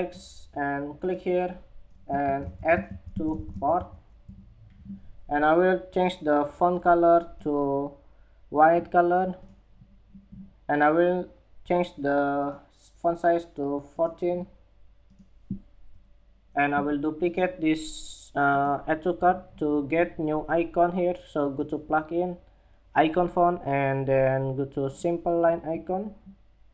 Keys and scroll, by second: 3.7 Escape, 3.9 Escape.